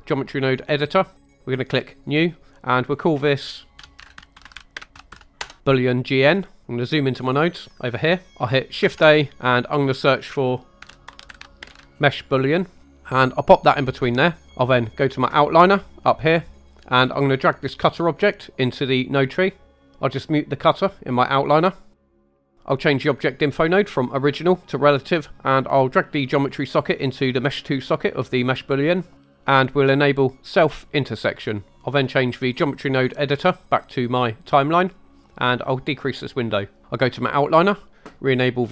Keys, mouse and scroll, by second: 1.9-6.6 drag, 4.0 o, 6.6-7.0 middle drag, 6.6 scroll up 2, 7.2 scroll up 2, 7.7 middle click, 8.8 shift+a, 14.2 click, 14.5 click, 19.0 click, 21.1 click, 21.9 middle click, 22.2 click, 24.6-25.0 drag, 30.6-31.8 drag, 33.4-36.0 drag.